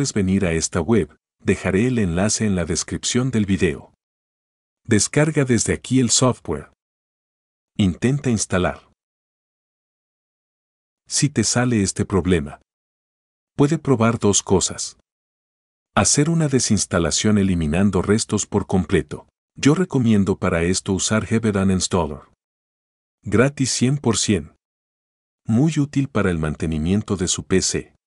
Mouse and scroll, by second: 7.3 click, 13.4 click, 14.4 click, 17.4 click, 21.2 click, 25.3 click.